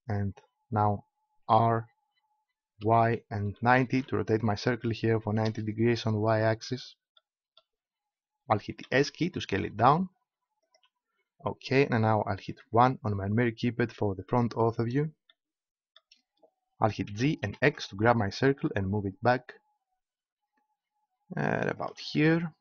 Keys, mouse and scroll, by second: 1.4 r, 6.2-8.7 middle drag, 8.7 s, 10.7-12.6 drag, 12.6 KP_1, 15.7-17.0 middle drag, 17.0 g, 21.8-22.6 drag.